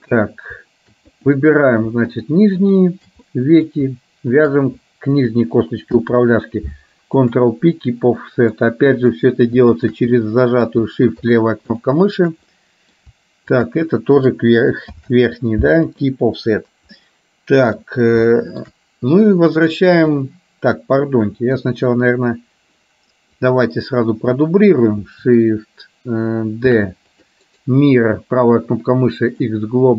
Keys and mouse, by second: 1.2 click, 2.7 shift+click, 3.5 middle click, 4.6 shift+click, 6.1 ctrl+p, 8.3 middle click, 9.8 shift+click, 10.3 middle click, 11.3 shift+click, 11.8 shift+click, 12.7 middle click, 13.6 shift+click, 15.0 ctrl+p, 17.0 middle click, 18.3 shift+middle click, 20.3 middle click, 21.7 KP_1, 23.5-24.6 drag, 26.8 shift+d, 27.6-29.6 right drag.